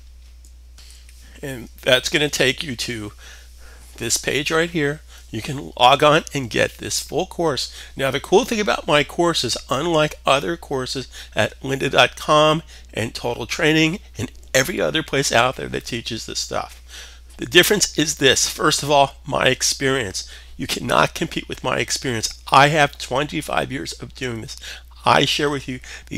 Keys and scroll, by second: 0.3 alt+super+Tab.